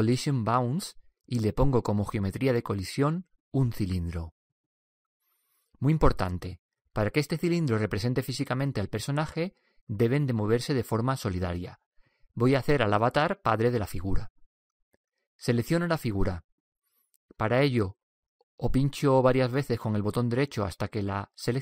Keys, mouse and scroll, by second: 10.6 t.